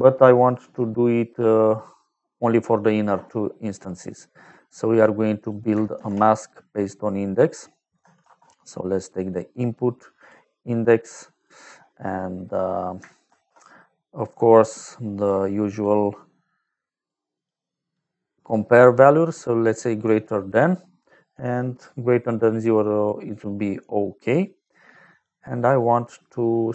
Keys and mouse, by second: 3.9 middle click, 4.7 middle click, 5.4 click, 5.9 shift+a, 8.1 shift+a, 10.1 click, 11.3 click, 12.0 middle click, 13.2 shift+a, 15.1 click, 15.6 click, 16.4 click, 17.3 click, 19.2 click, 22.7 middle click, 24.5 click.